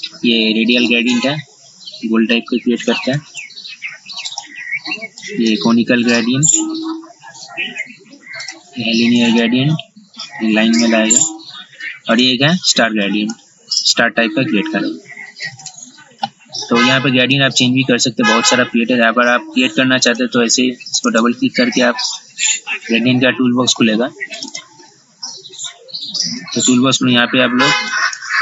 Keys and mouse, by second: 0.0 click, 3.4 ctrl+z, 4.4 click, 7.7 ctrl+z, 8.6 click, 11.1 ctrl+z, 12.3 click, 15.7 ctrl+z, 17.4-28.4 drag.